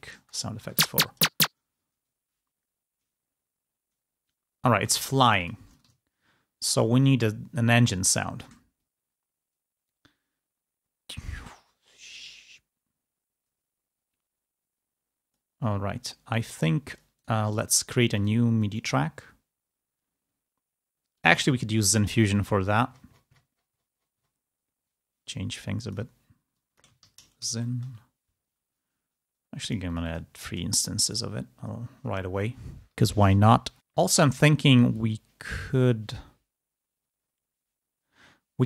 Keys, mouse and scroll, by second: 0.2 space, 0.2 click, 4.6 space, 5.4 click, 5.9 ctrl+scroll up 2, 6.6 ctrl+space, 8.2 space, 9.0-15.4 drag, 16.7 click, 18.2 click, 18.5 click, 21.1 click, 21.5-22.2 scroll down 2, 23.2-24.4 scroll down 1, 25.7 click, 26.4 click, 26.9 shift+z, 27.4 shift+n, 29.5 click, 30.9 click.